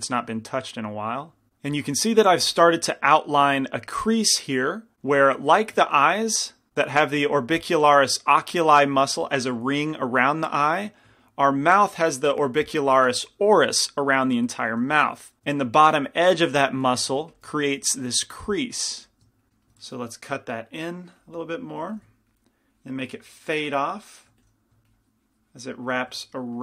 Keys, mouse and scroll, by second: 1.5 f, 1.9-5.5 middle drag, 11.3-15.9 middle drag, 17.4 shift+c, 17.4 f, 18.1 f, 19.0 click, 19.2 f, 19.5 ctrl+z, 19.9 ctrl+z, 22.1 f, 24.5 f.